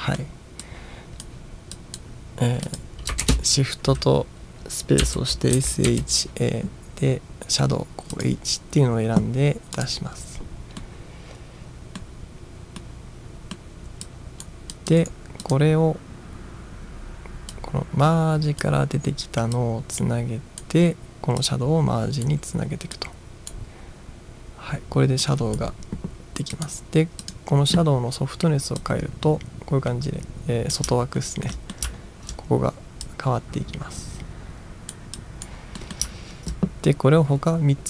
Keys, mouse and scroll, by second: 0.0 middle drag, 0.6-1.3 drag, 1.8 drag, 2.7 click, 3.2 shift+space, 5.1 s, 5.6 h, 5.9 a, 8.2 click, 9.8 click, 10.8-12.0 middle drag, 12.8-13.5 middle drag, 14.1-14.4 drag, 14.7 click, 15.0 right click, 15.5-15.9 drag, 17.6-18.6 drag, 19.6-20.6 drag, 21.4-22.3 drag, 22.9-23.5 drag, 25.2 click, 26.6 click, 27.3-27.8 drag, 28.8-30.8 drag, 31.2-32.3 ctrl+scroll up 5, 31.6 ctrl+middle drag, 33.1-34.9 drag, 35.2 click, 35.8 middle drag, 36.2 ctrl+scroll down 1.